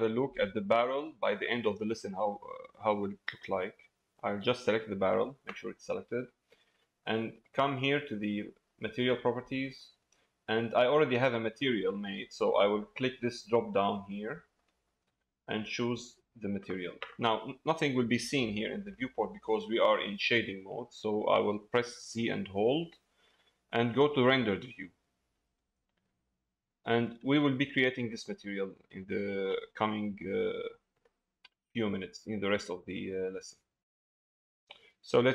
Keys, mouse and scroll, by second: 3.7 click, 7.4 click, 11.9 middle click, 14.6-17.2 drag, 17.2 middle click, 18.8 middle click, 25.8 middle click, 27.3 shift+middle click, 27.8 middle click, 28.9 shift+middle click, 29.5 middle click, 30.1 middle click, 32.5 middle click, 34.0 middle click.